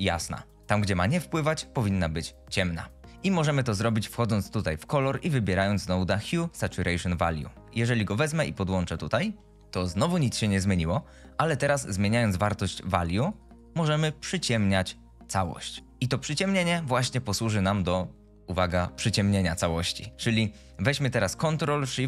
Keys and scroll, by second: 3.1 shift+a.